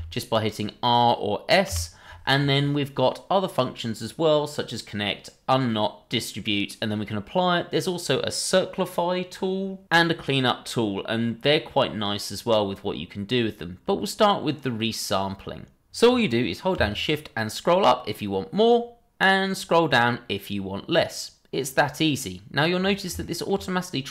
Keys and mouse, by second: 1.7 r, 23.2 shift+middle drag.